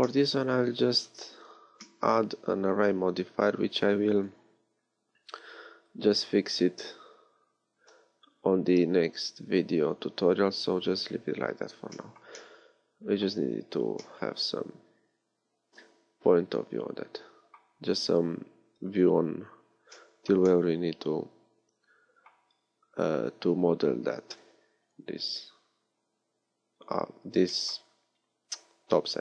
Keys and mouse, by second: 16.3-19.9 middle drag, 23.5-27.6 middle drag.